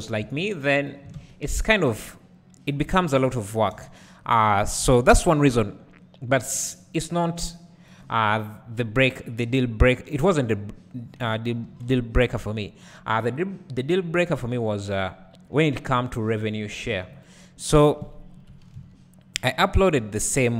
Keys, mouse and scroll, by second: 0.8 click, 1.1 alt+a, 2.8 1, 5.1 b, 6.8-17.7 drag, 11.6 ctrl+l, 16.8 ctrl+r, 17.7 right click, 18.3 KP_Decimal, 19.3 z, 19.4 click, 19.6 `, 20.3-20.5 scroll up 1.